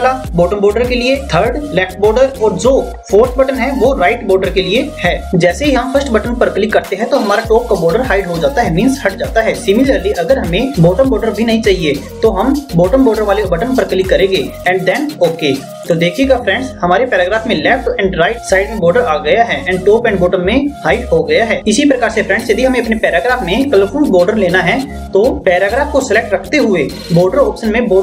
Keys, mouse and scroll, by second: 7.1 click, 14.1 click, 27.8 click.